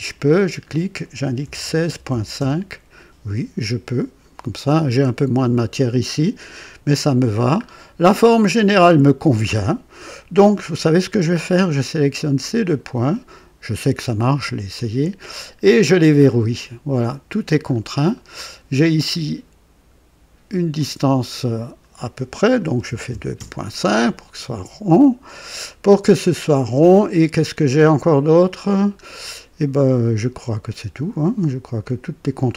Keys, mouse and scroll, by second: 0.0 click, 1.4-2.3 typing, 7.0 scroll up 2, 7.6 scroll down 2, 8.2-8.5 scroll up 2, 8.7-9.3 right drag, 12.5 click, 14.7 click, 16.2 click, 17.6 scroll down 2, 18.1 right click, 20.7 click, 22.6 KP_2, 22.8 KP_Decimal, 23.0 KP_5, 23.3 KP_Enter, 26.3-26.7 scroll up 1, 28.5 scroll down 1, 31.5 scroll down 1, 32.4-32.5 right drag.